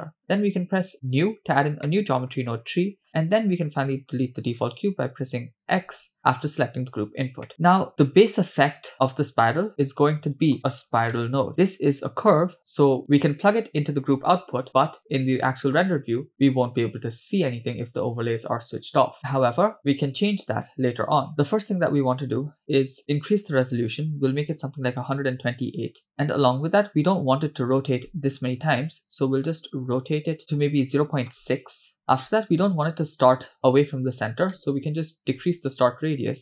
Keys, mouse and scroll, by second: 1.0 click, 1.9 middle click, 2.3-3.3 scroll up 7, 3.3 click, 5.6 x, 7.0-7.5 scroll down 3, 7.5 middle click, 9.8 shift+a, 11.6-11.9 scroll up 2, 12.0 click, 12.8 click, 16.1 click, 17.8 click, 19.2 click, 19.5 click, 21.3 middle click, 24.0-25.1 drag, 26.1-29.2 scroll up 4, 29.2 scroll up 1, 29.3-30.9 drag, 31.0-32.0 shift+drag, 35.4-36.4 shift+drag.